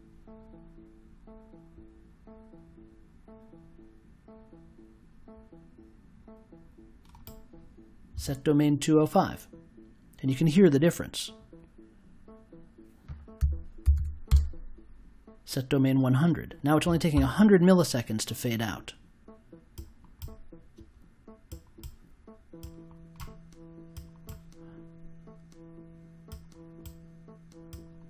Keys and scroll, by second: 13.3 1, 13.8 0, 14.2 Return.